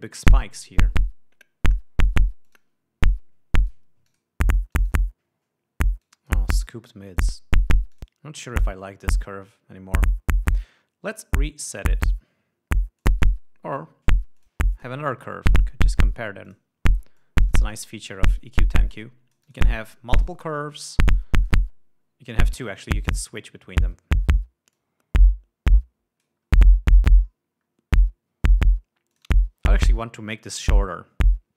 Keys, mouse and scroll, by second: 0.6-2.3 drag, 2.9 click, 4.2 click, 4.5 click, 5.2 click, 6.5 click, 7.6 click, 8.4 click, 13.4 click, 14.8 click, 15.2 click, 16.9 click, 17.6-19.0 drag, 19.2-20.3 drag, 20.6-21.4 drag, 21.9 click, 22.8 click, 24.0-25.0 scroll up 4, 25.2-26.9 drag, 26.9 scroll down 2, 27.7 scroll down 2, 28.1 scroll up 2, 29.6 click.